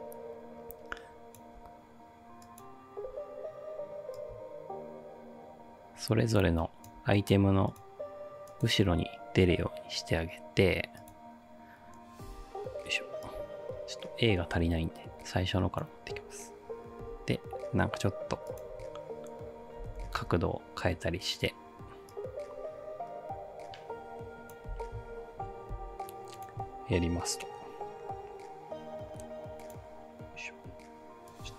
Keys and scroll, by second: 12.3 ctrl+d, 17.0 r, 19.6-20.5 typing, 24.7 space, 25.8 space.